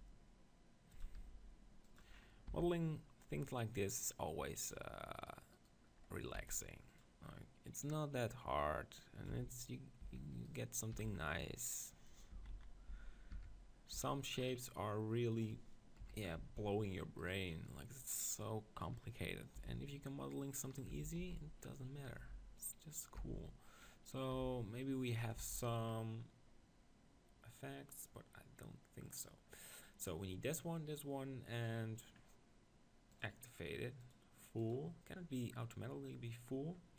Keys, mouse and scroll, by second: 1.2 r, 1.9-3.9 drag, 2.5 e, 4.7-6.9 drag, 5.1-7.9 right drag, 5.9 middle click, 6.3 r, 7.0-9.6 drag, 7.0 middle click, 9.3 Tab, 10.0 Tab, 10.4-12.2 drag, 10.9 r, 12.4 Tab, 12.5 z, 12.9 z, 14.0 Tab, 14.4-16.2 middle drag, 16.0 KP_1, 16.4 Tab, 17.2-19.2 drag, 19.5 g, 20.7-22.6 drag, 20.9 Tab, 21.2 z, 22.2 g, 22.7-24.5 drag, 23.2 Tab, 24.5 r, 25.3-27.1 drag, 25.4 Tab, 27.1 middle click, 29.1-34.7 middle drag, 34.7-36.9 drag.